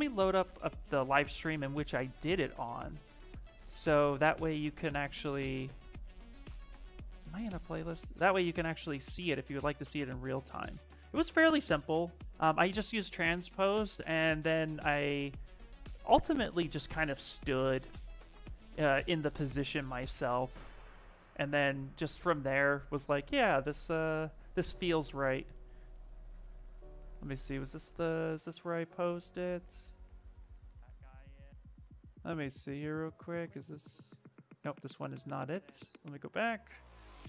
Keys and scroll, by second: 0.0-0.5 typing, 1.2 Caps_Lock.